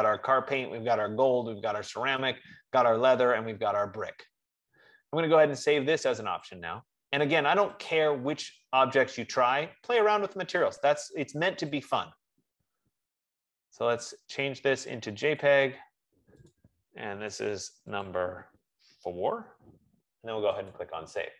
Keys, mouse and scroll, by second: 6.7 click, 8.2 click, 12.1 click, 15.8 click, 16.8 click, 17.7 click, 18.2 click, 19.2 BackSpace, 19.7 4, 21.1 click.